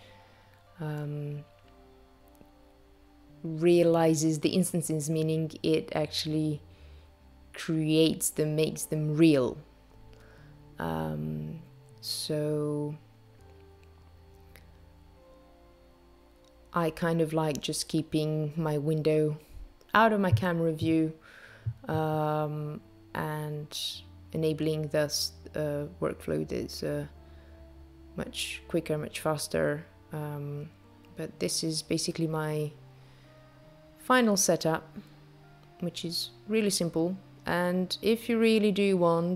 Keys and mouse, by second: 9.3 click, 13.2 click, 16.8 click, 18.7 click, 19.7 click, 21.6 click, 24.4 click, 26.5 click, 28.3 click, 32.1 click, 33.6 click, 37.6 click, 39.0 click.